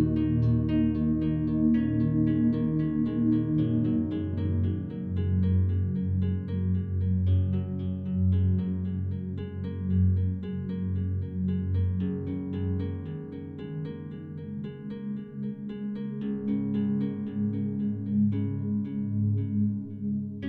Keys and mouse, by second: 0.8 typing, 1.2 click, 2.1 click, 2.4 click, 3.5-5.1 drag, 6.1 typing, 6.3 click, 6.8 click, 8.1 typing, 8.5 click, 9.9-13.2 drag, 14.7 typing, 17.2-18.4 drag, 18.8 typing, 19.0 click, 19.7 click.